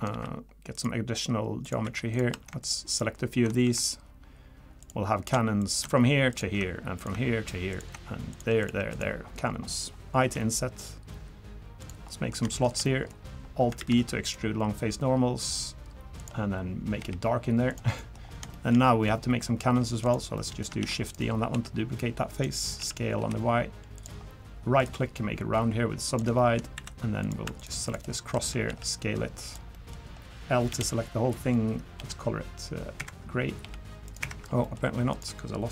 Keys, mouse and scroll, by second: 0.1 ctrl+r, 1.8 3, 2.1 click, 2.6 ctrl+shift+click, 4.8 click, 5.6 click, 6.3 ctrl+shift+click, 7.0 shift+click, 7.7 ctrl+shift+click, 8.3 shift+click, 8.6 shift+click, 8.8 ctrl+shift+click, 9.4-9.7 scroll up 1, 10.2 i, 12.1 middle click, 12.5 shift+middle click, 12.8 middle click, 13.4 scroll up 1, 13.8 alt+e, 17.0 g, 18.0 middle click, 18.2 scroll up 2, 18.5 shift+middle click, 18.9 middle click, 19.4 scroll up 1, 20.0 click, 20.4 middle click, 20.8 shift+d, 21.5 s, 22.8 s, 24.2 scroll up 3, 24.8 right click, 26.4 shift+middle click, 26.7 2, 27.2 click, 27.6 shift+click, 28.7 s, 29.7 middle click, 30.7 l, 31.0-31.3 scroll down 3, 31.3 middle click, 32.0 h, 33.0 Escape, 33.6 g, 34.1 right click, 34.6 middle click, 35.1 click.